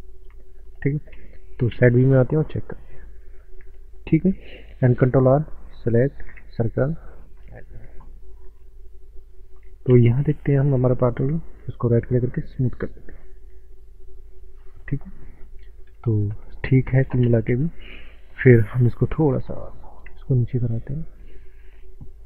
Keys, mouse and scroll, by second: 1.2 ctrl+space, 2.6 scroll up 1, 3.0 shift+middle click, 5.0 ctrl+r, 5.5 ctrl+r, 5.7 ctrl+r, 5.8 ctrl+r, 5.9 ctrl+r, 6.1 ctrl+click, 6.2 ctrl+r, 6.5 click, 9.9 ctrl+space, 10.7 middle click, 11.3 Tab, 11.7 right click, 12.1 click, 12.7 middle click, 13.9-14.3 scroll down 2, 14.0 middle click, 16.0 Tab, 16.4 scroll up 1, 17.2 ctrl+space, 18.5 click, 20.3 shift+middle click, 20.8 shift+middle click, 21.3 shift+middle click, 21.7 scroll down 1.